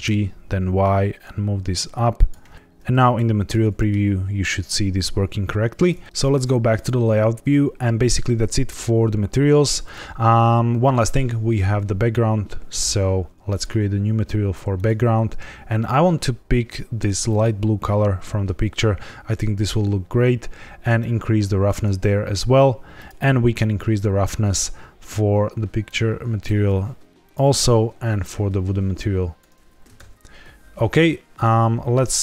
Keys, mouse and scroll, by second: 6.7 click, 7.8 ctrl+s, 8.6-9.7 scroll down 2, 11.0 click, 12.6-13.4 scroll up 2, 13.4 click, 14.7 click, 20.9 click, 22.9 click, 24.5-25.8 scroll down 4, 25.8 click, 27.2 click, 30.0 ctrl+s, 31.0-31.4 scroll down 1, 31.4 z.